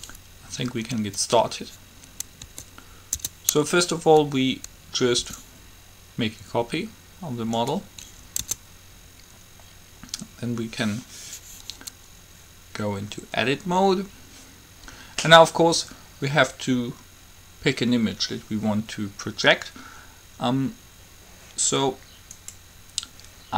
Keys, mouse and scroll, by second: 2.7 Tab, 3.3 Tab, 5.4 shift+d, 8.7 Tab.